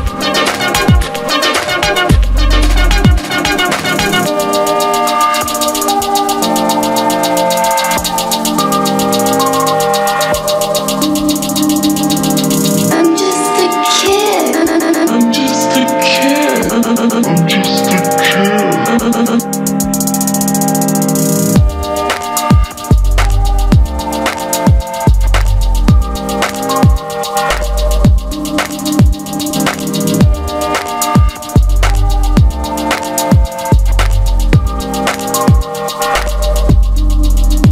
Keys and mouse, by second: 0.3-1.9 middle drag, 1.9 g, 2.3-3.3 middle drag, 3.3 a, 3.6 middle click, 4.5 alt+s, 4.8 a, 5.3 Tab, 5.9 Tab, 6.4 Tab, 7.1 Tab, 7.5 Tab, 7.7 middle click, 8.0 q, 10.0 h, 11.4 Tab, 13.5 q, 15.0 z, 15.7 click, 15.9 g, 16.3 click, 17.1-18.6 typing, 18.5 middle click, 19.0 middle click, 19.4 Tab, 19.8 middle click, 19.9 g, 21.0 z, 21.6 middle click, 21.9 s, 22.9 s, 24.3 click, 24.5 q, 25.9 z, 26.1 z, 28.6 q, 30.5 g, 31.8 s, 32.2 middle click, 33.2 middle click, 33.6 q, 35.4-37.5 typing, 35.8 click, 37.3 click.